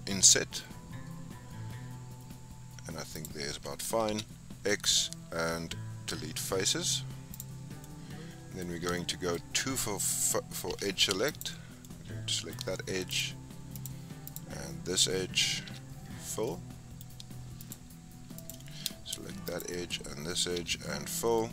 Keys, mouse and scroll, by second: 4.0 x, 7.8-9.3 middle drag, 9.3-10.6 scroll up 4, 10.6 2, 11.2 click, 11.8-13.0 middle drag, 13.0 shift+click, 13.7 shift+click, 14.2 shift+click, 15.6 f, 16.4-17.5 middle drag, 17.5 shift+click, 18.3 click, 19.4 shift+click, 20.5 f, 21.3 middle click.